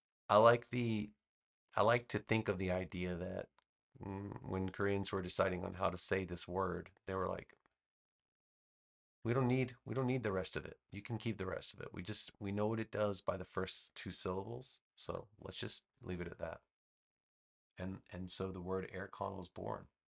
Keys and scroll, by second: 14.9 BackSpace.